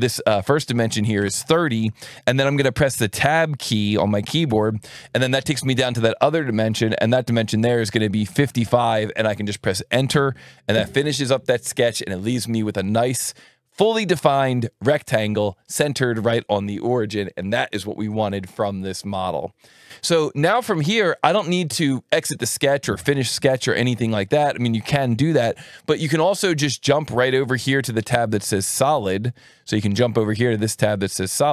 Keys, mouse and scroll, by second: 1.2 KP_3, 1.8 KP_0, 4.4 Tab, 8.2 KP_5, 10.1 KP_Enter, 28.2 click, 29.0 alt+1, 29.9 click.